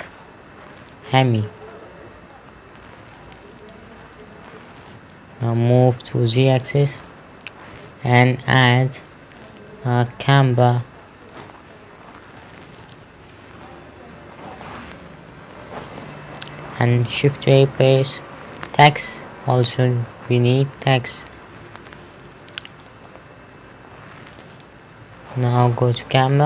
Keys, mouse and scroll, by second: 1.2 click, 4.0 click, 8.9 shift+a, 11.8 click, 12.5 middle click, 17.1 shift+Num_Lock, 17.5 shift+a, 19.0 click, 20.1 scroll down 1, 23.3 right click, 24.7 click, 26.3 KP_0.